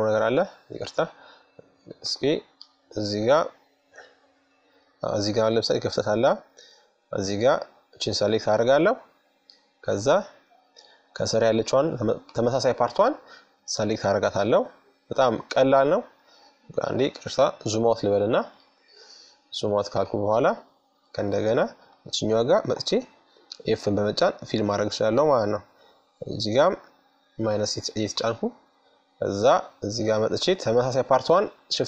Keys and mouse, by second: 0.6-2.5 right drag, 2.5-5.3 middle drag, 6.7-8.3 right drag, 7.5 middle click, 8.3 middle click, 8.4 right click, 8.5 middle click, 9.2 middle click, 9.6-15.5 middle drag, 15.6-17.2 drag, 16.0 KP_Subtract, 17.9-21.2 middle drag, 21.2-22.9 right drag, 22.2 f, 23.7-25.3 right drag, 24.5-26.4 middle drag, 25.7 KP_Subtract, 27.8-31.1 middle drag, 30.9-31.8 drag, 31.6 KP_Subtract.